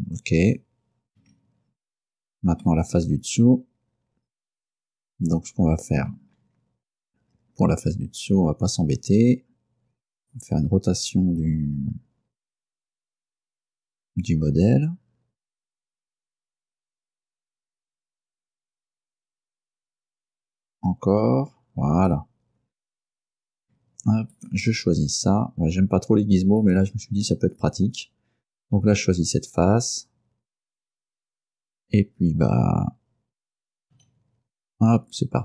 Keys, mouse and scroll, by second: 1.3 Tab, 2.7-6.3 middle drag, 6.3-7.1 scroll down 4, 7.4-8.0 scroll up 4, 16.8 click, 17.9-22.4 drag, 23.7 Tab, 24.4 right click, 26.7 click, 34.0 g.